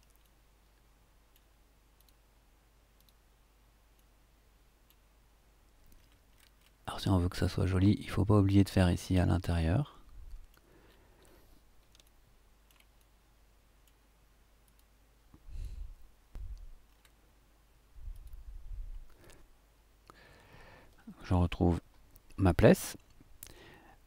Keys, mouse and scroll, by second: 0.2-1.5 middle drag, 1.9 click, 2.9 click, 3.9 click, 4.7 middle click, 5.9-6.3 scroll up 1, 6.8 middle click, 7.3 click, 8.7 click, 9.5-10.7 middle drag, 10.8-11.4 scroll down 2, 12.0 shift+click, 12.3 shift+middle click, 12.9 shift+middle click, 13.2 click, 13.5 middle click, 14.6 click, 15.6 click, 16.8-18.1 scroll up 3, 18.1 click, 18.4-19.3 scroll up 2, 20.7-23.7 middle drag, 23.8 scroll up 3.